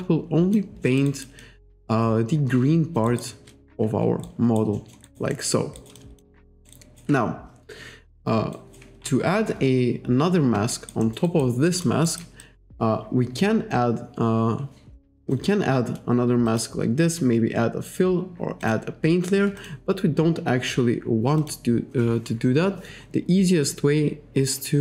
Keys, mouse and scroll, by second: 0.9 alt+middle click, 1.2 alt+right click, 1.5 alt+click, 3.1 alt+right click, 3.4 alt+click, 4.3 alt+right click, 4.8 alt+middle click, 5.4 alt+middle click, 5.8 alt+right click, 6.0 alt+click, 6.6 alt+middle click, 6.8 alt+right click, 8.6 alt+right click, 10.8 alt+right click, 11.1 alt+middle click, 11.8 alt+middle click, 12.2 alt+right click, 12.5 alt+click, 15.3 click, 16.5 click, 18.7 click, 19.7 click, 21.5 click.